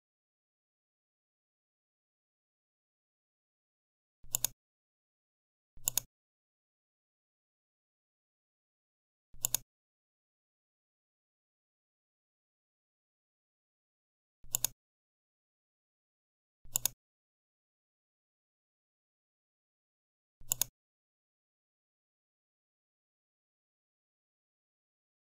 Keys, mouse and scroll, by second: 4.2 click, 5.7 click, 9.3 click, 14.4 click, 16.6 click, 20.4 click, 22.4-23.3 typing.